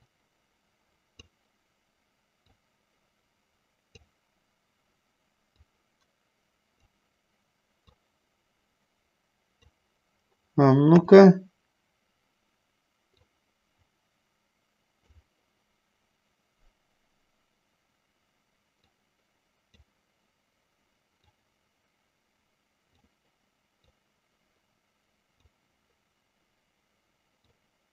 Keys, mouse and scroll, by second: 0.3-1.7 drag, 2.7-4.3 drag, 5.7-7.2 drag, 8.2-10.0 drag, 11.2 KP_1, 13.4-15.4 drag, 19.0-20.1 drag, 21.4-23.3 drag, 24.1-25.8 drag, 27.7-27.9 drag.